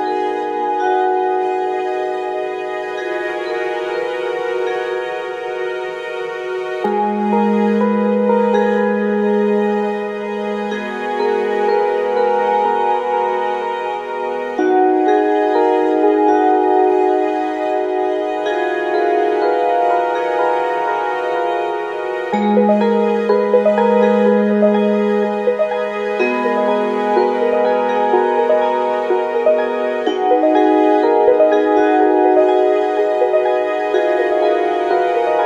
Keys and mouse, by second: 0.6-3.8 right drag, 6.1 s, 8.8 Tab, 9.5 shift+z, 9.9-10.2 middle drag, 11.9-13.0 middle drag, 13.7 click, 14.2 KP_1, 15.9 click, 18.2 shift+click, 19.0 Tab, 21.2 ctrl+r, 24.3 ctrl+r, 28.9 shift+click, 29.1 shift+click, 31.1 shift+d, 33.2 p, 35.2 Tab.